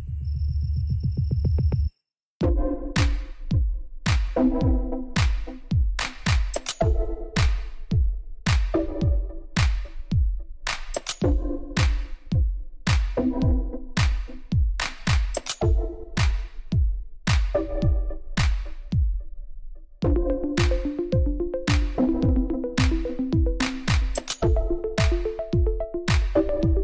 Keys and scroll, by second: 0.5 ctrl+r, 2.1 Tab, 2.5 ctrl+2, 4.1 Tab, 4.9 ctrl+r, 6.0 Return, 6.4 s, 6.5 x, 9.1 Tab, 10.0 Tab, 11.0 ctrl+r, 13.0 Tab, 18.6 b, 18.8 l, 18.9 u, 19.2 e, 19.2 Return, 21.7 0, 22.3 8, 22.5 1, 22.7 f, 22.9 Return, 24.0 Tab.